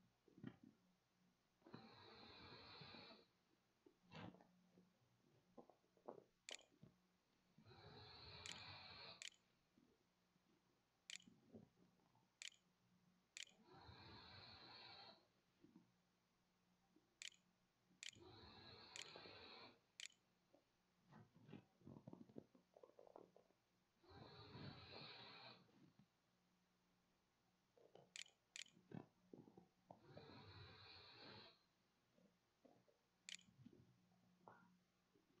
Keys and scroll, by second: 4.9-9.5 typing, 6.3 Return, 10.9 Tab, 12.2-22.0 typing, 26.5-29.4 typing, 31.6-34.1 typing.